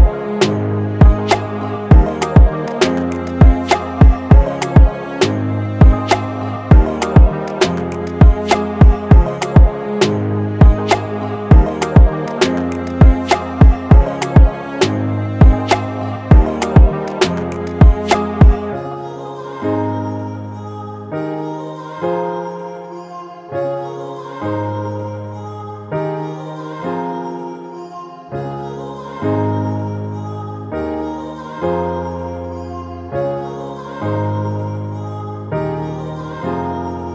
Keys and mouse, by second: 1.5 click, 3.8 right click, 5.8 click, 8.5 click, 11.2 click, 16.6 click, 21.3 click, 24.8 click, 33.0-37.1 drag.